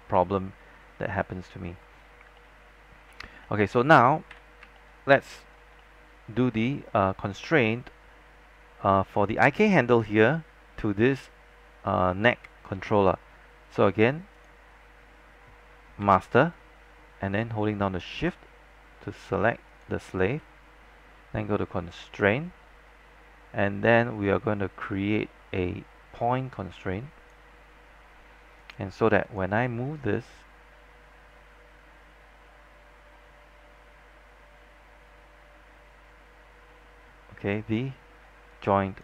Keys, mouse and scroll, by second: 0.3 alt+middle click, 1.2 alt+middle click, 2.5 alt+middle click, 3.5 middle click, 4.4 z, 4.9 alt+middle click, 5.9 alt+middle click, 6.5-7.0 scroll down 1, 7.0-11.5 scroll up 1, 14.4 click, 16.1 w, 17.0-17.4 scroll up 1, 17.4-17.9 scroll down 1, 19.8 shift+click, 20.6-22.2 scroll down 1, 22.2-37.7 drag, 37.7 z, 38.1 scroll up 1, 38.6 alt+click.